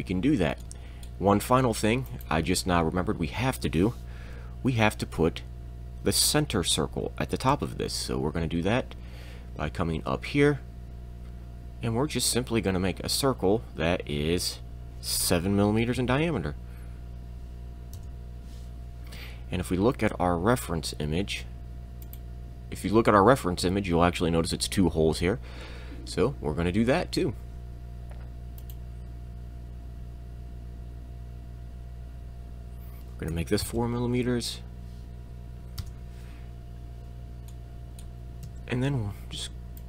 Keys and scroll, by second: 7.5 shift+c, 15.8 7, 18.0 Return, 28.4 c, 33.3 4, 33.7 m, 35.8 Return, 38.5 e.